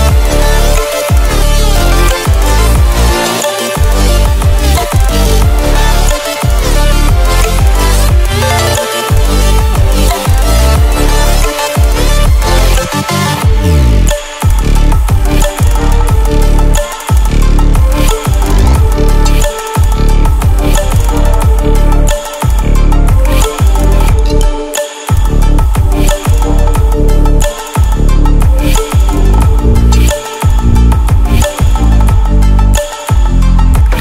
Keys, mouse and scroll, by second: 1.0-2.8 drag, 8.2-9.1 alt+shift+click, 9.8-10.1 click, 10.6-11.1 ctrl+alt+scroll down 2, 11.1-11.5 ctrl+alt+scroll up 2, 12.2-13.4 drag, 19.5 right click, 20.4-23.4 drag, 30.3 right click, 32.5 ctrl+w.